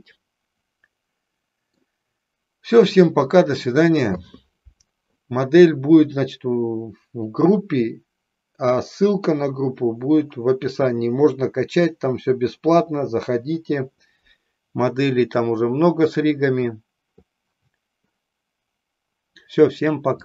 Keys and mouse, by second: 0.0-1.9 middle drag, 20.1 click.